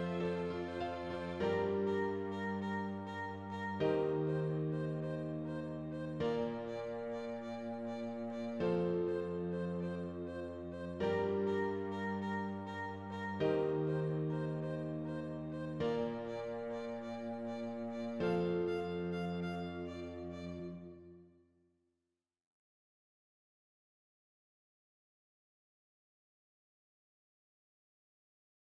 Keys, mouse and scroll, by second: 0.0-1.2 drag, 1.2 scroll down 2, 1.5 middle click, 2.1 click, 2.6 KP_0, 3.2 scroll up 1, 3.7 s, 4.6 s, 6.0 scroll up 1, 6.8 s, 7.6 shift+middle click, 8.4 scroll up 2, 8.5 Tab, 8.9 Tab, 9.0 click, 9.2 Tab, 10.4 alt+a, 10.9 l, 11.4 shift+d, 13.3 alt+a, 15.8 click, 16.2 g, 18.6 e, 19.9 e, 22.9 alt+a, 23.1 Tab, 23.5 scroll up 1, 23.8-24.7 scroll down 1, 24.7 click, 26.2 alt+a, 26.4 ctrl+s.